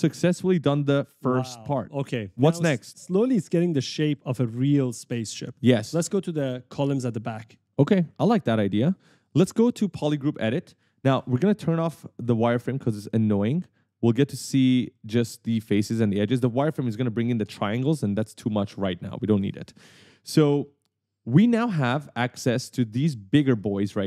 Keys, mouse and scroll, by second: 0.6 click, 0.8-2.8 typing, 10.1 click, 10.6 right click, 13.2 click, 14.0 right click, 16.9 click, 18.8 click, 20.1 right click, 20.5 d, 21.6 right click, 22.1 a, 23.6 right click, 23.7 a.